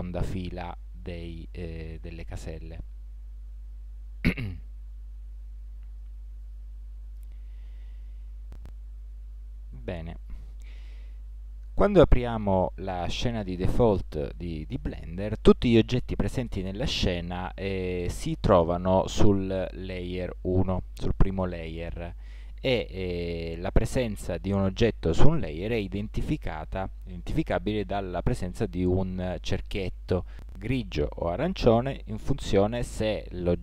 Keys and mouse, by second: 0.2 alt+6, 0.7 alt+7, 1.1 alt+8, 1.7 alt+9, 2.5 alt+0, 6.4-8.3 middle drag, 10.3 ctrl+shift+-, 18.1-20.8 right drag, 21.9-25.5 right drag.